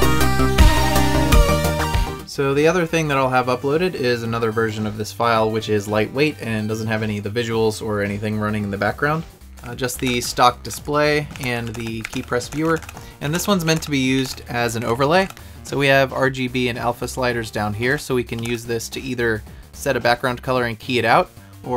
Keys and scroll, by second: 0.6 Up.